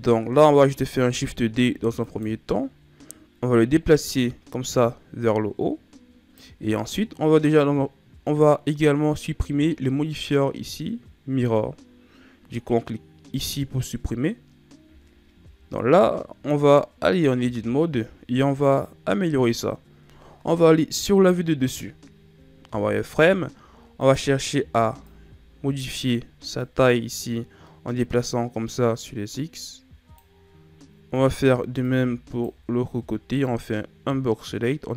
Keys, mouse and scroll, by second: 1.0 shift+d, 3.8 click, 13.2 click, 15.0-17.3 shift+scroll up 5, 17.3 Tab, 20.9 KP_7, 22.6 z, 23.9 right click, 24.4 b, 26.5 click, 31.1 right click, 31.3 b, 33.3 click.